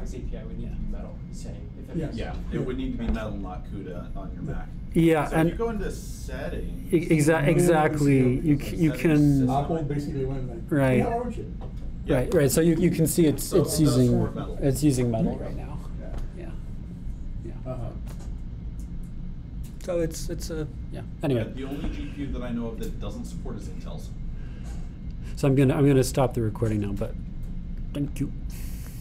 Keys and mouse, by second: 24.4-29.0 drag.